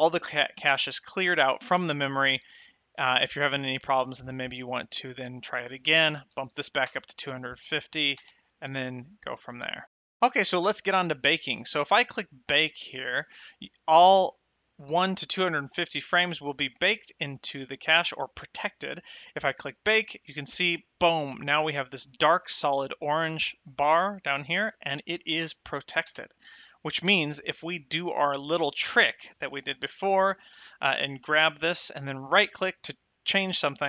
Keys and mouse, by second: 5.8 click, 6.6 KP_2, 7.1 KP_0, 8.5 space, 20.0 click, 25.7 shift+Left, 26.4 space, 29.4 space, 29.8 click, 31.5 g, 32.5 right click.